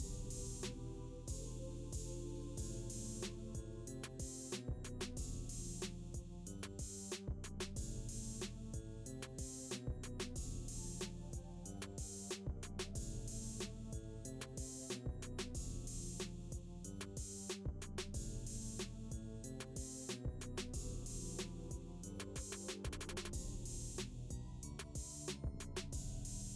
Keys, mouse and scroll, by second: 1.1 right click, 3.8 click, 6.9-9.4 typing, 10.2 Return, 11.1-14.0 typing, 16.9 click, 24.3 click, 24.3 click.